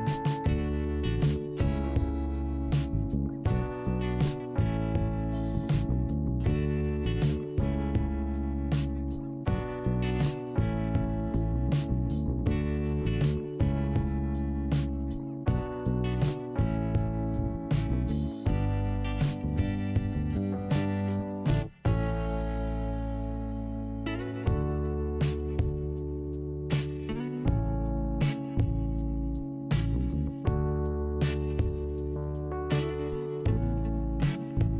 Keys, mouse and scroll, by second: 0.6 click, 2.4 click, 7.3 scroll down 1, 8.4-8.9 scroll up 2, 9.6 click, 11.3 middle click, 12.5 scroll up 2, 12.6 click, 12.8 click, 14.8 ctrl+Delete, 15.5 scroll down 1, 16.3 click, 17.5-18.5 scroll down 1, 18.5-19.2 scroll up 2, 19.9 click, 26.9 click, 28.3 scroll down 2, 28.4 click, 29.8 click, 31.3 scroll up 1, 31.9 click, 32.0 click, 33.6 ctrl+Delete.